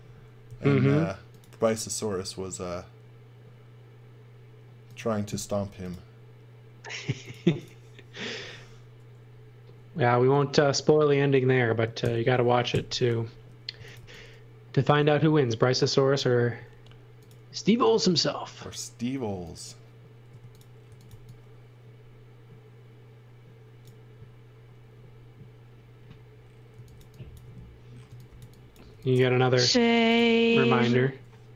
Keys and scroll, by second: 0.4 m, 5.5 m, 8.3 space, 12.0 shift+g, 12.7 Return, 13.5-14.5 typing, 16.7 m, 20.3-21.5 typing, 26.5-29.4 typing.